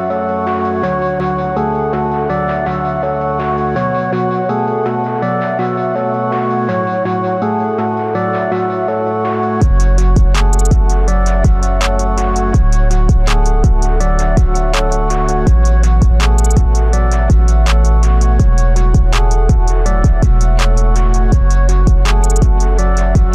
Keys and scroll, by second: 5.6 ctrl+i.